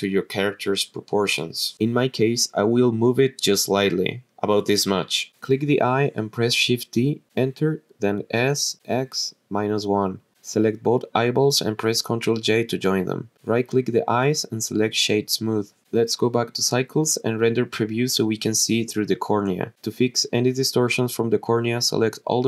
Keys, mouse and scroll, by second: 5.3 shift+d, 6.8 Return, 8.3 s, 9.0 x, 9.6 KP_Subtract, 10.0 KP_1, 11.2 Return, 11.3 click, 11.5 shift+click, 12.7 ctrl+j, 14.7 right click, 16.5 click, 17.0-18.2 drag, 19.3 click, 22.0-22.4 drag.